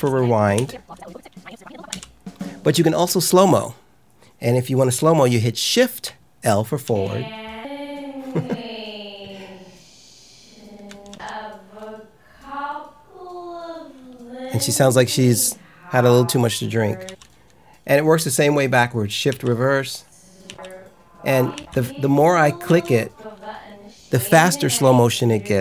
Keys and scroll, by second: 1.8 k, 6.8 shift+l, 11.0 shift+l, 17.0 k, 19.2 shift+j, 20.4 shift+j.